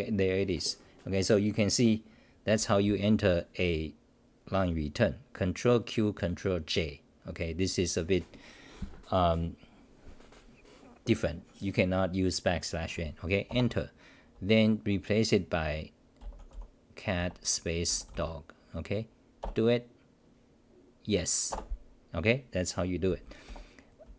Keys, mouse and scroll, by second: 13.5 Return, 13.5 n, 19.4 Return, 23.4 f.